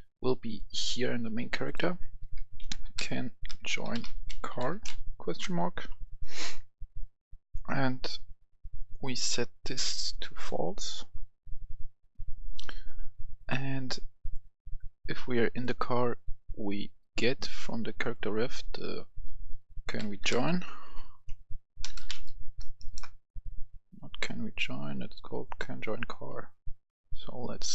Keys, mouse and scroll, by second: 0.3 click, 0.9 click, 2.0 click, 2.5-4.5 typing, 5.3 Return, 7.3 click, 12.2 right click, 13.4 click, 14.0 right click, 17.2-18.8 drag, 18.9 click, 20.1 a, 20.2 n, 21.4-22.5 typing, 25.2 click.